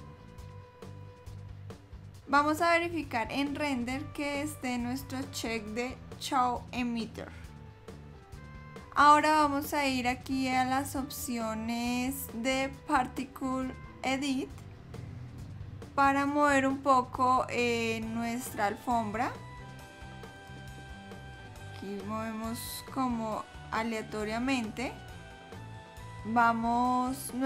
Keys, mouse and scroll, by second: 2.2 scroll down 4, 3.2-4.1 scroll up 2, 4.6 click, 8.2 middle click, 10.5 click, 19.9 click, 21.6 click, 25.3 click.